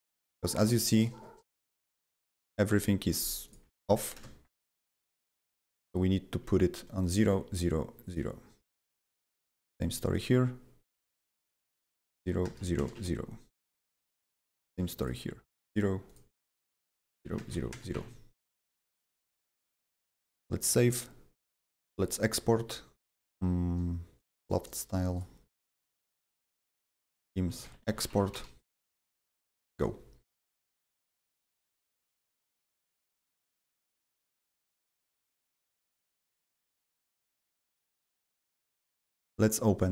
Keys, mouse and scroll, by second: 2.5 right click, 4.1 KP_0, 5.7 click, 6.4 KP_0, 7.0 click, 7.3 KP_0, 8.0 click, 9.4 click, 10.1 ctrl+click, 11.1 ctrl+click, 11.9 KP_0, 12.1 Tab, 12.4 KP_0, 12.9 Tab, 14.5 click, 16.0 ctrl+click, 16.3 ctrl+click, 17.0 KP_0, 17.2 Tab, 17.7 KP_0, 17.9 Tab, 18.9 click, 20.2 ctrl+s, 21.9 click, 24.2 click, 25.1 click, 26.3-28.7 typing, 29.5 click, 31.8 click, 38.2 click, 39.0 click.